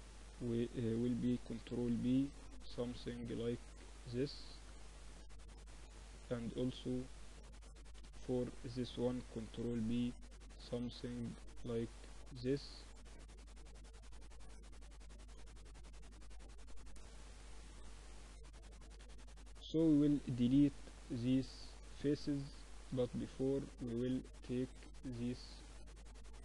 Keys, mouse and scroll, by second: 0.6 click, 1.4 ctrl+b, 1.6 right click, 5.5 a, 5.7-7.7 drag, 7.5 g, 9.1 ctrl+b, 11.9-14.7 middle drag, 13.2 ctrl+r, 15.0 ctrl+r, 16.9-18.9 drag, 18.9-19.9 middle drag, 19.9-21.1 drag, 22.6 Escape, 23.4 click, 24.1 middle click, 25.0-26.4 drag, 25.0 right click.